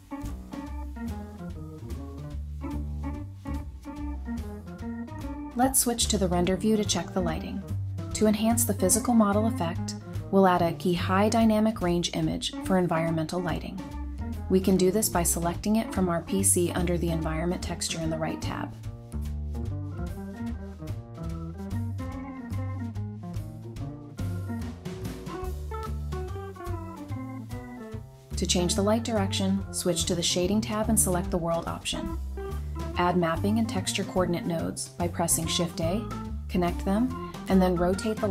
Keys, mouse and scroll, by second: 1.5 alt+h, 24.9 x, 29.3-29.9 scroll down 1, 29.9 0, 31.7 scroll down 1, 31.9 middle click, 32.3-33.0 scroll up 1, 33.1-34.8 typing, 35.7 double click, 35.9 typing.